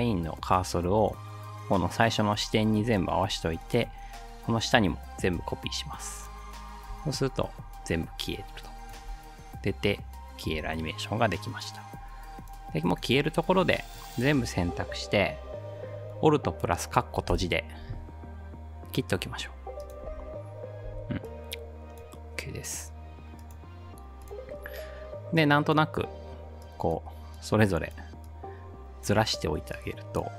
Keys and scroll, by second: 5.2 ctrl+v, 6.9 space, 9.0 space, 10.6 space, 17.3 alt+], 20.1 space, 20.9 space.